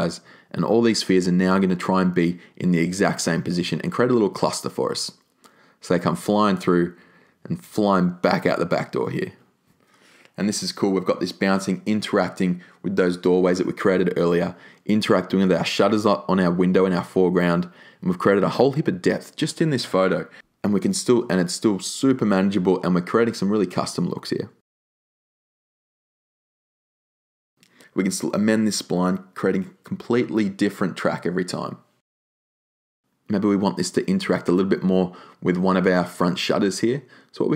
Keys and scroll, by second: 0.0 Return, 20.0 r.